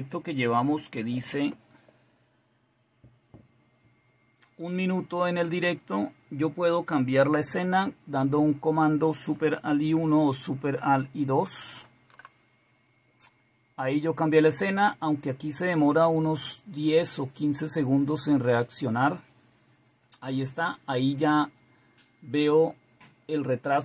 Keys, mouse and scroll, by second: 11.5 alt+super+KP_1.